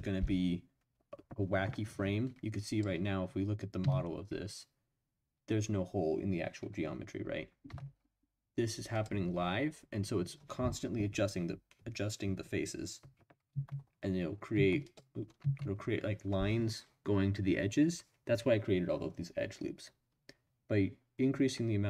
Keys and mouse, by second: 2.7 click, 3.8 Tab, 7.7 Tab, 14.5 Tab, 14.8 click, 15.4 Tab.